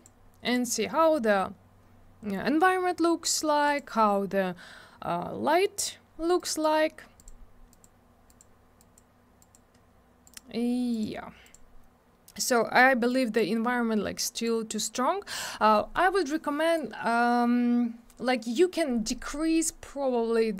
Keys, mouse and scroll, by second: 0.0 click, 0.4 click, 0.5 double click, 3.7 click, 3.7 click, 6.4 click, 7.2 click, 7.2 click, 7.7 click, 7.8 click, 8.3 click, 8.4 click, 8.8 click, 9.0 click, 9.4 click, 9.5 click, 10.2 click, 10.3 click, 10.9 click, 11.0 click, 11.4 click, 11.5 double click, 14.4 click.